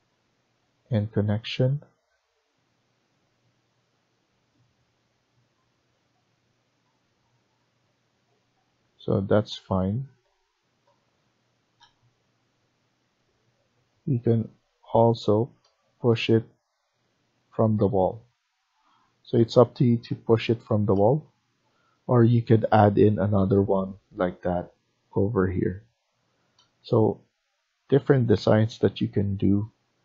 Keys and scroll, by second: 8.5 Escape, 8.7 Escape, 9.2 Escape, 20.0 ctrl+z.